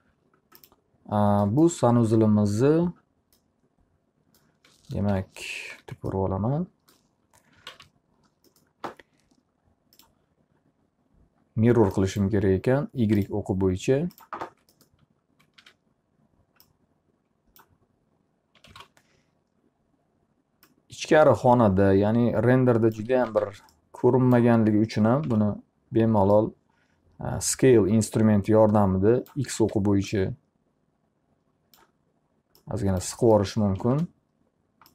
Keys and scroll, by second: 5.2 p, 6.3 z, 7.9-8.8 typing, 15.7 w, 19.3 r, 23.3 w, 25.8 r, 29.7 w, 33.9 space.